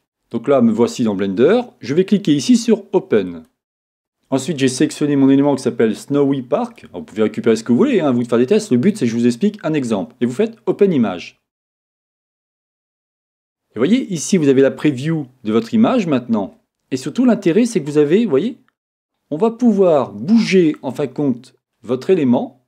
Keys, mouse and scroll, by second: 3.2-12.7 drag, 17.3 middle click.